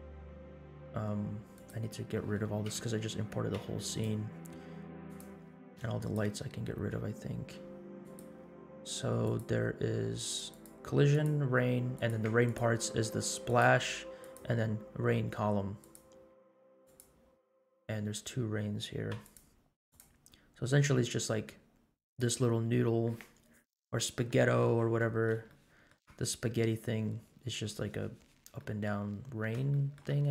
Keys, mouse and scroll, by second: 1.5 click, 2.6 KP_Decimal, 3.5 x, 5.0 click, 6.0 shift+click, 6.9 x, 8.0 click, 9.2 click, 10.5-11.5 drag, 11.9 click, 13.4-14.6 drag, 15.8 click, 16.8 click, 17.8-18.7 scroll down 5, 19.1 x, 19.9 click, 20.5-21.5 scroll up 6, 22.1-22.4 drag, 24.8-25.3 middle drag, 25.6 shift+middle click, 26.4-27.7 scroll down 6, 28.5 middle click, 29.3 scroll down 2, 29.7 shift+middle click.